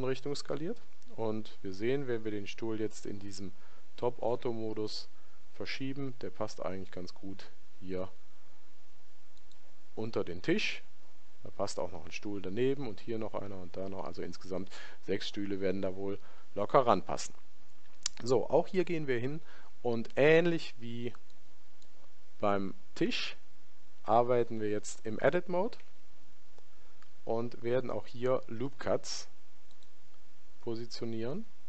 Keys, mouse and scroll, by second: 4.7 g, 21.2 click, 22.8-24.7 middle drag, 25.8 Tab, 27.9 ctrl+r.